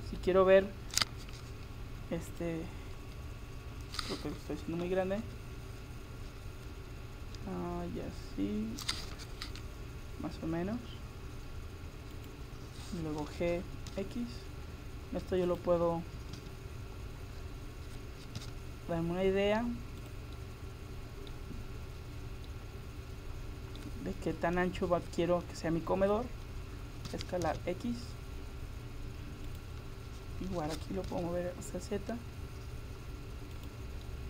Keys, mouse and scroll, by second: 0.2-2.4 middle drag, 2.4-4.0 drag, 5.2 g, 13.2 g, 16.4 s, 20.4-22.0 middle drag, 22.2 middle click, 27.1 s, 30.6 g.